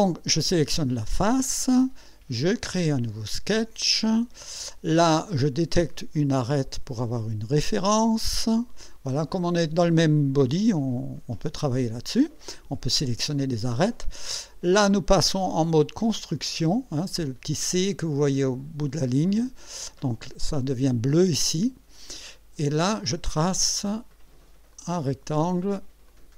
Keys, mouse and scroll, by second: 2.6 click, 4.0-4.7 right drag, 6.6 click, 8.3 click, 19.3 click, 22.8 click, 24.7 click, 26.1 click.